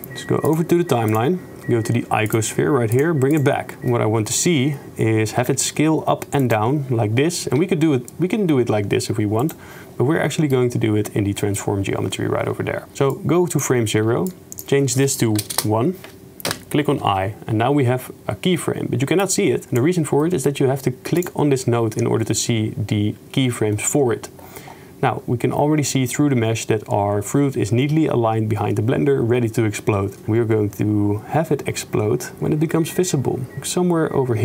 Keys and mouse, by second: 0.5 click, 3.0 click, 5.5 s, 7.6 s, 10.3 click, 11.5 click, 13.3 click, 14.4-15.6 shift+drag, 19.5-19.8 drag, 20.2 click, 21.2 click, 30.2-34.4 drag.